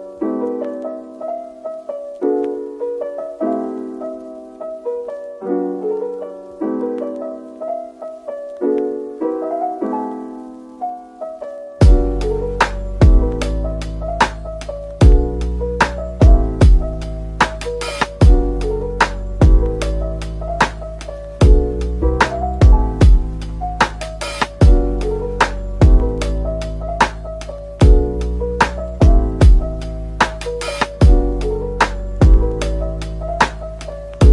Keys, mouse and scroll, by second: 0.1-0.4 scroll down 1, 0.4 middle click, 1.5 shift+click, 2.2-3.8 scroll down 1, 6.2 middle click, 10.6 shift+click, 12.3 /, 13.1 middle click, 14.4 shift+right click, 15.1 typing, 16.4 scroll down 1, 17.4 middle click, 17.9-18.7 typing, 20.3 Tab, 20.9 typing, 21.5 Tab, 22.1 click, 22.8 typing, 23.7-24.1 scroll up 1, 24.5 middle click, 25.1 typing, 26.1 middle click, 27.2-28.1 typing, 29.6-30.5 typing, 31.0 middle click, 32.4 Tab, 33.2 typing, 33.9 ctrl+b.